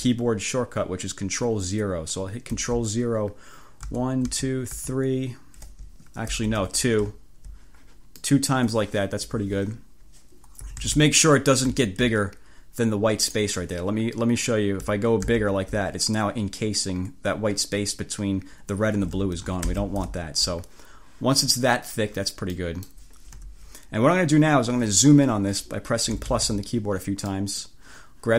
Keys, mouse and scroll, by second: 3.9 ctrl+0, 6.4 ctrl+z, 7.3-7.6 ctrl+scroll up 2, 9.3 1, 10.7 =, 11.9 ctrl+scroll up 3, 13.4 scroll up 2, 15.3 ctrl+0, 19.7 ctrl+z, 20.3 scroll up 2, 20.4 ctrl+click, 22.6 click, 23.5 1, 26.1 =, 27.4 click.